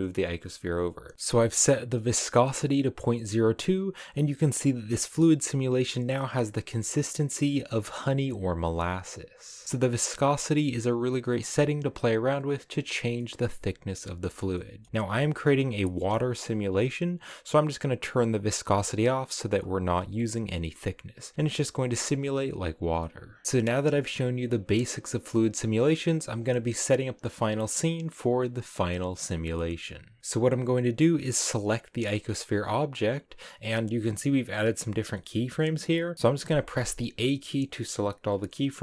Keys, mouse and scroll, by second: 1.1-2.4 middle drag, 2.4-3.0 scroll up 1, 3.0-7.0 middle drag, 7.6-12.6 middle drag, 12.8-15.6 middle drag, 15.6 space, 18.5 space, 19.5 space, 20.1 click, 20.9 click, 21.4 space, 22.3-23.4 middle drag, 23.4-30.2 drag, 30.2-31.3 middle drag, 31.3 right click, 36.1 a, 36.4 a.